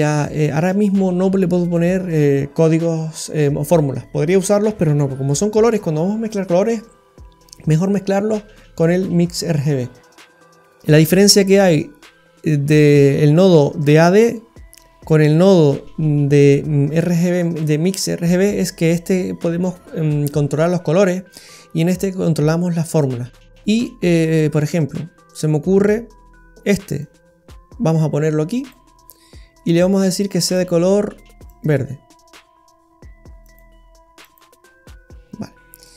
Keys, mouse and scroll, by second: 10.4 middle click, 10.4-10.7 scroll up 7, 10.7-11.3 scroll down 6, 11.3 middle click, 14.8-15.3 scroll down 3, 15.1 middle click, 15.7-16.4 scroll up 11, 17.6 middle click, 21.3-21.7 scroll down 6, 22.6 scroll down 2, 23.2 middle click, 23.5-24.0 scroll down 4, 24.1-25.4 scroll down 6, 25.4 middle click, 25.4 scroll down 2, 27.0 click, 29.1 middle click, 30.5 click, 32.5 scroll down 1, 33.4 click, 35.5 scroll down 2, 35.8 middle click.